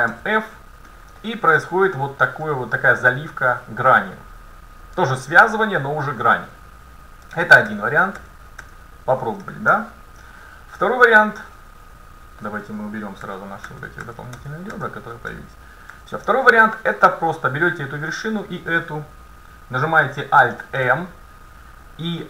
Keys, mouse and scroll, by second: 0.2 f, 1.3 middle click, 7.3 ctrl+z, 7.7 ctrl+z, 8.2 ctrl+z, 8.8 ctrl+z, 9.8-13.3 middle drag, 13.3 ctrl+z, 13.8 ctrl+z, 14.1 ctrl+z, 14.4 ctrl+z, 14.8 ctrl+z, 16.0 a, 16.4 middle click, 17.7 middle click, 17.7-20.5 right drag, 20.7 alt+m.